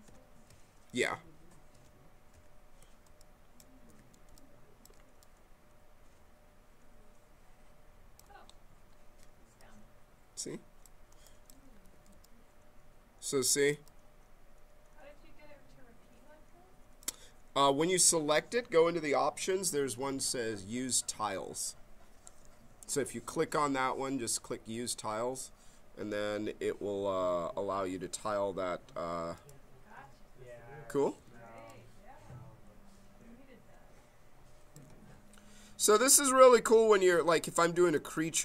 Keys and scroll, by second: 0.9 ctrl+z, 3.9 q, 11.8 q, 28.2 q, 31.1 q, 35.1 ctrl+z, 36.7 q.